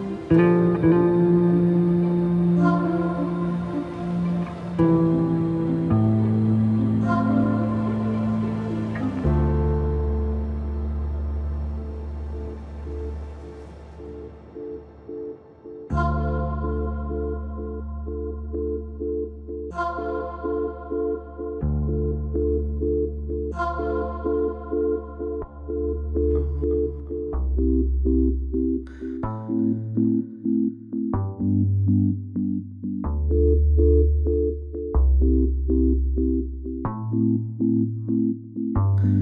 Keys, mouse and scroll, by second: 0.8 click, 3.9 click, 6.1 scroll down 1, 7.0 alt+scroll up 1, 9.5 click, 12.5 space, 12.6 click, 14.3-16.0 drag, 18.6 alt+scroll down 1, 19.0 click, 21.8 click, 26.2 click, 29.6 alt+right click, 31.1-35.1 drag, 35.1 ctrl+d, 35.6 space, 35.8 click, 36.7 space, 37.4 scroll down 2, 39.0 scroll up 1.